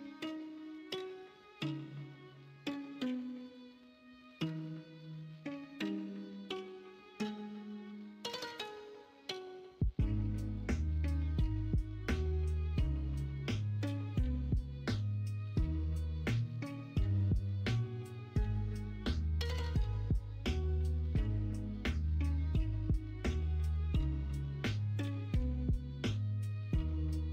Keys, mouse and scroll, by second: 1.2 middle click, 1.7-2.4 middle drag, 4.6 Tab, 5.9 KP_1, 6.1 KP_3, 9.9 s, 12.1 alt+z, 12.9-16.3 drag, 17.5 s, 23.7 e.